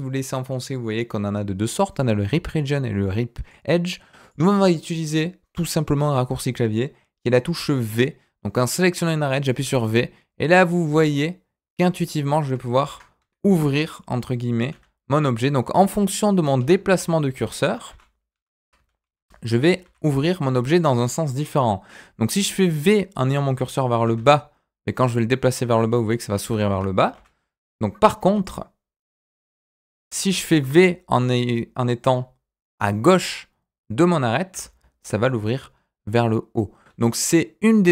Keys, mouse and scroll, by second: 4.2 click, 13.8 click, 14.7 v, 17.9 g, 18.9 ctrl+z, 19.1 ctrl+z, 19.8 ctrl+z, 20.7 click, 27.1 ctrl+z, 28.4 click, 29.2 v, 30.5 ctrl+z.